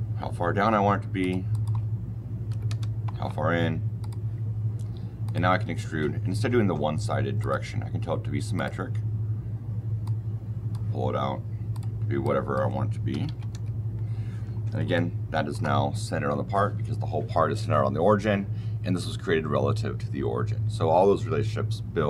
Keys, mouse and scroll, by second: 1.1 shift+middle click, 1.4-2.4 shift+scroll, 2.4 shift+KP_1, 2.6 shift+KP_Enter, 3.9 shift+middle click, 5.2 shift+middle click, 5.2 shift+middle click, 7.3 shift+middle click, 8.5 shift+middle click, 9.9 shift+middle click, 11.6 shift+middle click, 12.3 middle click, 13.0 shift+KP_1, 13.2 shift+KP_Decimal, 13.3 shift+KP_5, 13.4 shift+KP_Enter, 14.4 shift+middle click, 14.8 shift+middle click.